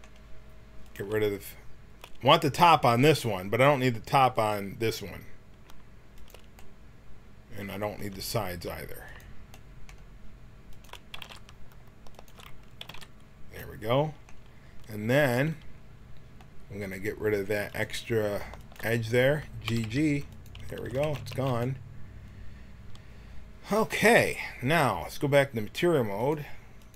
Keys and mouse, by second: 1.0-7.8 drag, 6.5 middle click, 9.1-14.0 drag, 11.1 x, 12.8 x, 17.7-20.3 drag, 19.6-21.2 typing, 26.2-26.9 drag.